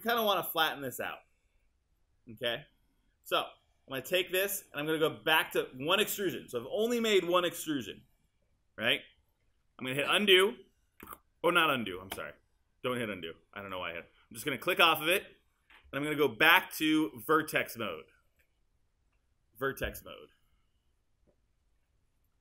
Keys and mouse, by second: 4.6 click, 16.7 alt+click, 17.1 alt+right click.